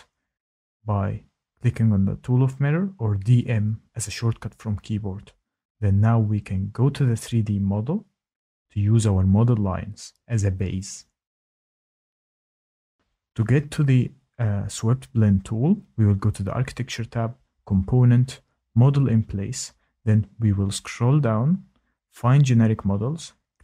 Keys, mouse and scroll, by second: 5.3 click, 7.3 click, 8.8 click, 16.5 click, 17.9 click, 19.5 click, 22.0 click, 22.9 click.